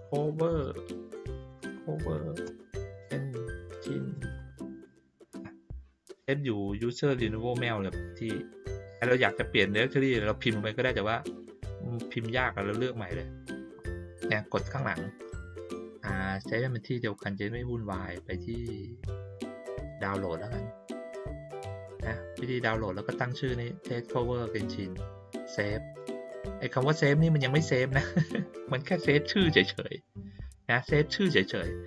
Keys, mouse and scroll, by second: 12.1 click, 19.8 click, 25.9 click.